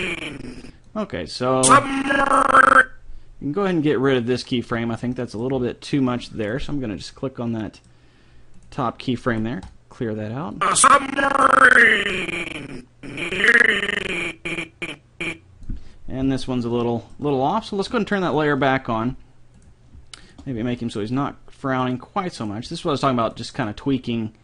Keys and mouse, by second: 1.6-3.3 drag, 4.2-5.8 middle drag, 6.4-8.3 drag, 8.5-9.7 drag, 9.3 Delete, 9.7 right click, 10.5 click, 16.9-18.3 middle drag, 18.3-19.6 drag, 20.3 right click, 20.6 g, 22.3 right click, 22.7 g, 22.9-24.4 right drag, 23.9 g.